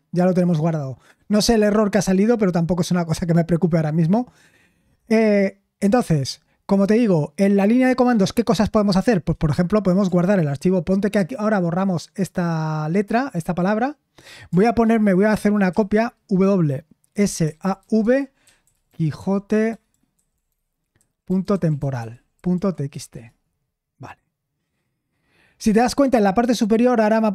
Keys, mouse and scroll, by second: 15.7 typing, 17.7-23.6 typing.